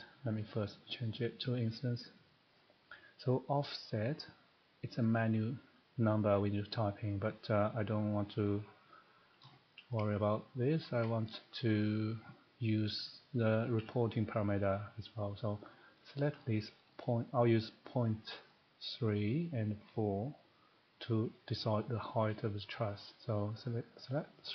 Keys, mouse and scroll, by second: 0.4 click, 1.6 click, 2.5 click, 8.2 click, 9.4 scroll, 10.0 middle click, 10.3 scroll up 4, 10.8 shift+middle click, 11.0 scroll up 2, 13.2 click, 13.8-14.4 scroll, 15.6-15.9 scroll, 16.4 middle click, 18.5 click, 23.6 click.